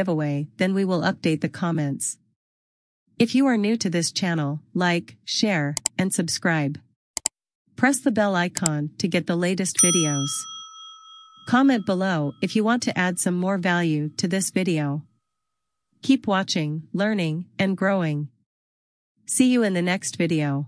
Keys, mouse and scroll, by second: 12.8 click.